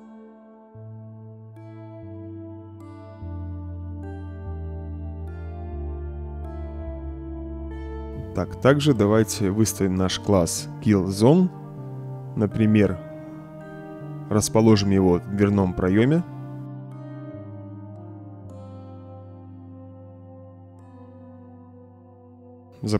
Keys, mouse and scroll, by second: 0.0-4.4 typing, 1.0-8.1 right drag, 6.1 w, 6.5 s, 9.5-10.7 drag, 11.2 right click, 11.3 d, 14.1 right click, 14.3 s, 15.5-16.6 drag, 16.7 right click, 17.1-17.4 drag, 17.5 right click, 18.0 click, 18.3 right click, 18.6 click, 19.1 click, 19.4 click, 19.8-22.2 typing, 19.9 click, 20.4-22.4 right drag.